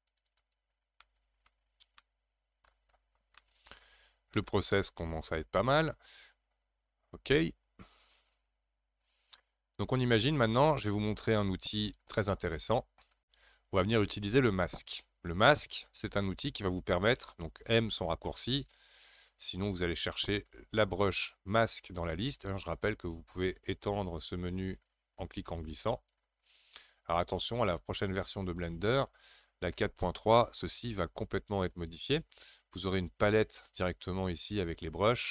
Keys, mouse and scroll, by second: 1.0 middle click, 1.6-2.0 scroll down 4, 2.0 middle click, 3.0-3.4 scroll down 1, 3.4 shift+middle click, 4.0-4.4 scroll up 4, 4.4-7.4 middle drag, 15.6 scroll down 3, 17.4-18.6 scroll down 6, 20.5-23.6 drag, 24.4-27.5 drag.